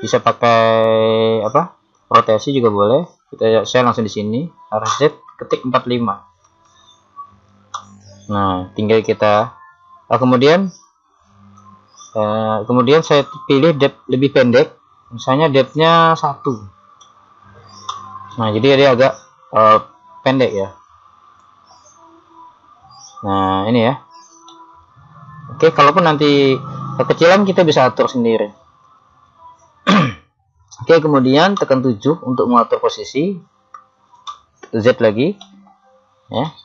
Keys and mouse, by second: 5.0 click, 11.2-12.4 middle drag, 11.6 z, 16.5 click, 21.4 click, 24.5-26.3 middle drag, 30.5-32.0 middle drag, 32.0 KP_7, 34.3 z.